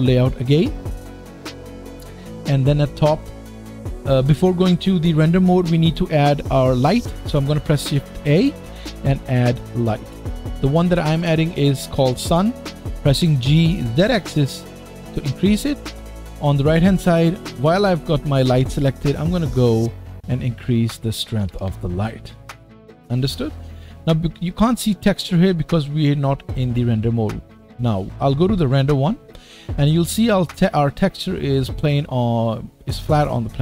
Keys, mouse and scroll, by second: 0.0-17.9 middle drag, 8.2 shift+a, 13.1 g, 17.9-19.5 drag, 19.5-20.8 middle drag, 20.8-28.8 drag, 28.8-33.6 middle drag.